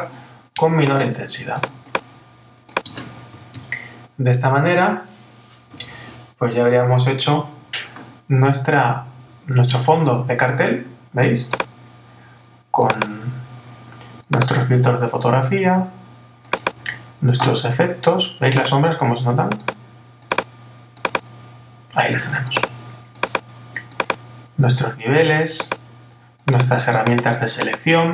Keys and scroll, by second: 3.5 super+-.